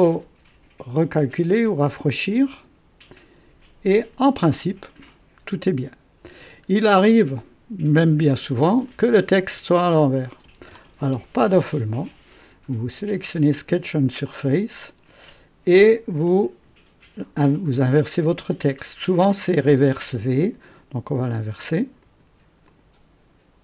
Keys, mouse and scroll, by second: 1.9 click, 6.3-6.6 scroll up 1, 6.9 right click, 8.8 click, 12.9 click, 14.8-16.3 drag, 20.5 click, 21.1 click, 22.0 click, 22.7 click.